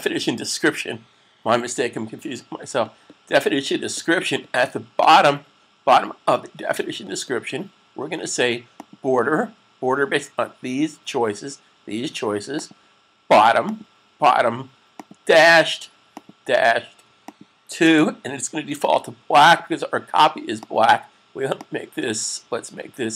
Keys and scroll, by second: 17.7 2.